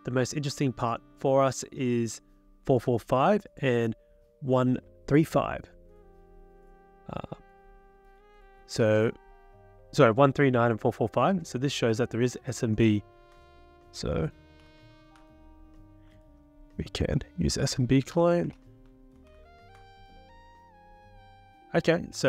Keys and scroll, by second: 14.4-15.2 typing, 16.4 ctrl+Right, 16.8 ctrl+Right, 17.9-19.8 typing.